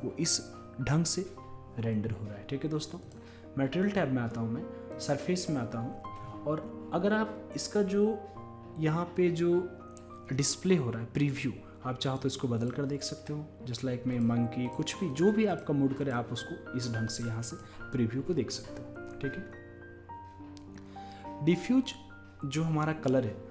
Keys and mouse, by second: 0.0 click, 3.1-6.7 drag, 12.1-23.5 drag.